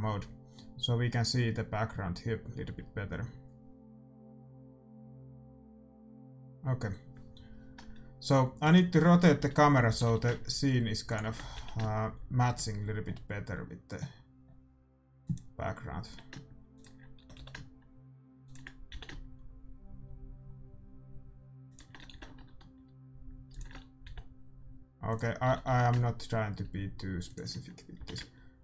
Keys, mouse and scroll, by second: 8.7-10.6 right drag, 9.9 r, 11.2-13.0 drag, 11.6 g, 16.1 g, 16.9-18.6 drag, 17.2 r, 18.9 g, 22.2 r, 24.1 g, 25.4-27.1 drag, 25.5 r, 27.5-28.6 drag, 28.0 g.